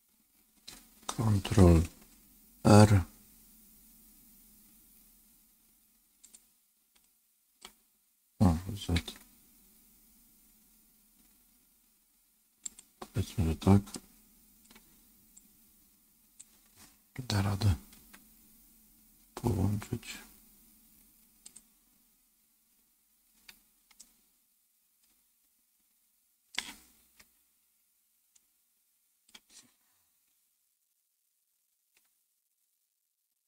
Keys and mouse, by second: 2.5 ctrl+r, 13.9 middle click, 15.3-16.3 drag, 17.9 g, 24.0-26.4 middle drag, 27.1 ctrl+z, 28.3 middle click, 31.9 KP_7.